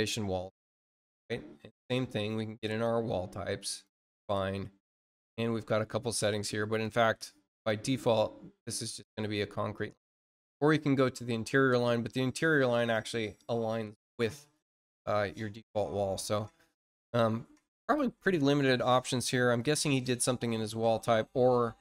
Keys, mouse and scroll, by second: 2.6 click, 3.6 click, 5.9 click, 6.7 click, 7.4 click, 12.5 click, 16.3 click, 17.7 click, 18.7 click.